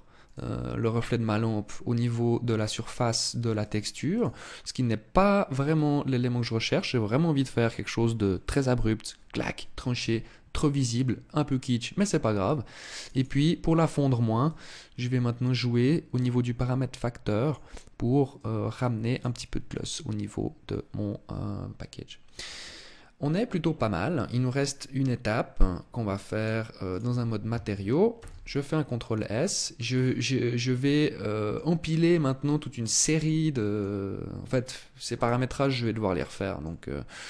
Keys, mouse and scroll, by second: 3.2 click, 3.6 click, 5.2-5.6 scroll down 2, 12.5 click, 12.7 click, 12.9 click, 14.0 click, 17.9 click, 25.9 click, 27.7 ctrl+s, 28.8 middle click, 29.4-29.8 scroll down 5, 30.4 middle click, 32.8 middle click, 34.0 scroll up 2, 34.7 right click, 35.7 middle click, 36.8 scroll down 1.